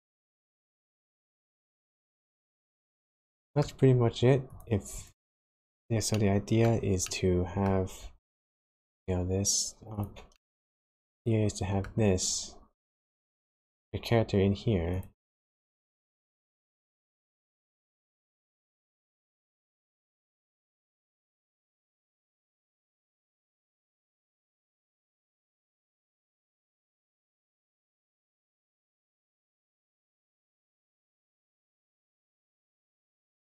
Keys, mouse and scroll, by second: 4.4 click, 4.9 click, 6.1 shift+middle click, 7.0 middle click, 8.1 s, 10.3 middle click, 14.9 click, 15.4 middle click, 17.1 r, 29.0 middle click.